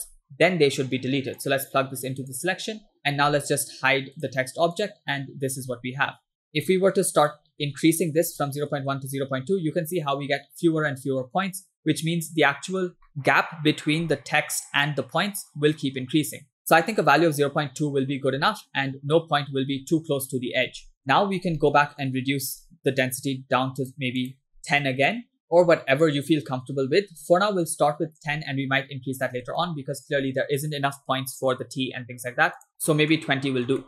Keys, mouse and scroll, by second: 0.2 scroll down 3, 0.5 middle click, 1.4-2.6 drag, 3.0 scroll down 1, 3.0 middle click, 4.3 click, 4.8 click, 5.2 middle click, 6.5 middle click, 6.5-6.8 scroll up 2, 7.2-8.9 drag, 9.7-10.3 scroll down 3, 11.6 scroll up 2, 13.4 shift+middle click, 14.0 shift+scroll down 1, 18.1-18.5 scroll down 2, 18.5-19.7 shift+middle drag, 20.5 scroll up 2, 20.8 middle click, 21.4 scroll down 2, 21.6 middle click, 22.2 scroll up 2, 22.7 middle click, 23.9 click, 24.3-25.3 drag, 25.4-27.7 drag, 29.7 shift+middle click, 32.6 click, 33.2 shift+middle click.